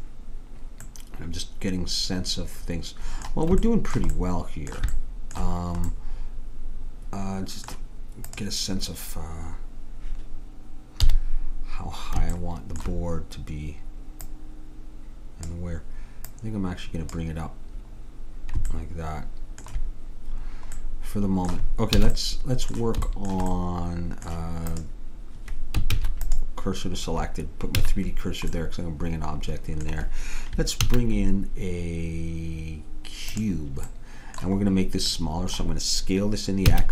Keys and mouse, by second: 2.5 middle click, 3.8-8.3 middle drag, 8.3-10.0 drag, 11.1 KP_3, 14.4-16.3 drag, 16.4-18.1 drag, 18.1 middle click, 22.1 a, 24.8-26.6 drag, 26.0 shift+s, 27.9 a, 28.8-30.9 middle drag, 30.9 shift+a, 36.7 s.